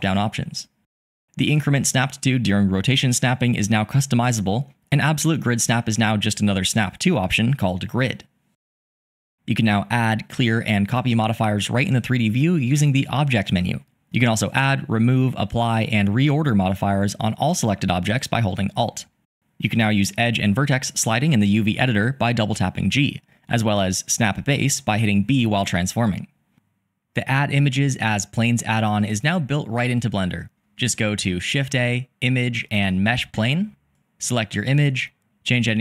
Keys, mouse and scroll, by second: 2.0 click, 4.3-6.1 drag, 9.5-15.3 drag, 16.0 alt+click, 18.4 alt+click, 30.4 shift+a.